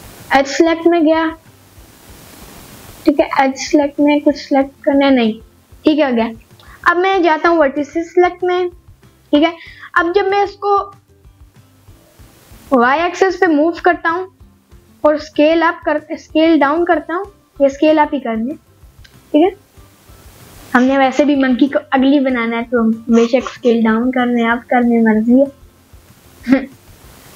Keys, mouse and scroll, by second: 1.4 click, 2.8 ctrl+click, 3.6 middle click, 4.4-5.8 middle drag, 6.4-6.9 scroll down 1, 6.9 middle click, 9.6 click, 9.6 scroll down 2, 9.6 middle click, 10.2 middle click, 10.8 g, 12.5 click, 12.8 scroll down 1, 13.0 scroll up 1, 13.2 middle click, 14.3-15.0 scroll down 2, 14.7 middle click, 15.2 s, 18.6 click, 19.3 middle click, 20.0 scroll up 2, 20.3 middle click, 20.9 scroll up 1, 21.2 middle click, 21.6 scroll up 1, 25.6 scroll up 1, 26.1-26.8 scroll down 1, 26.8 middle click.